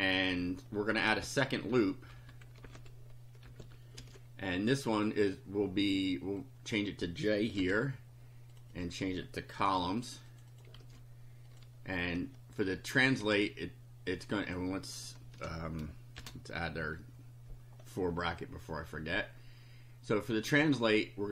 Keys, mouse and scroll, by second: 0.3 click, 1.3 Return, 1.7 Up, 2.1 Home, 2.7 shift+End, 3.4 ctrl+c, 3.6 ctrl+Down, 4.0 ctrl+v, 6.5 click, 7.6 j, 8.5 click, 9.5 ctrl+c, 10.3 click, 10.7 ctrl+v, 11.5 click, 12.1 Tab, 13.0 click, 13.2 Tab, 14.5 click, 15.3 Return, 16.2 shift+], 16.8 Up, 20.9 click.